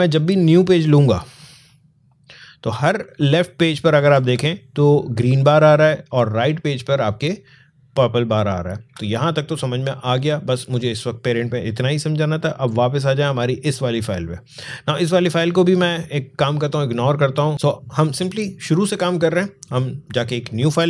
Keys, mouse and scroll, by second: 0.1 click, 3.0 alt+scroll down 1, 3.4 alt+scroll up 1, 4.2 space, 4.4 click, 4.8 space, 6.7 click, 6.8 space, 11.4 click, 13.8-14.3 scroll up 2, 14.5 alt+scroll down 1, 15.1 space, 15.3 click, 15.7 space, 17.5 click.